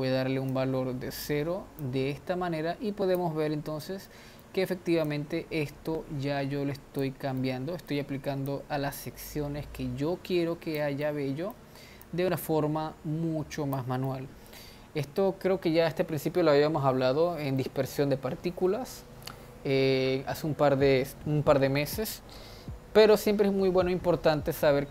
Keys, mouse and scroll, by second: 0.6-4.1 drag, 4.1-5.4 middle drag, 5.4-7.4 drag, 7.4-8.7 middle drag, 8.7-11.1 drag, 11.1-12.3 middle drag, 12.3-14.2 drag, 14.2-17.2 middle drag.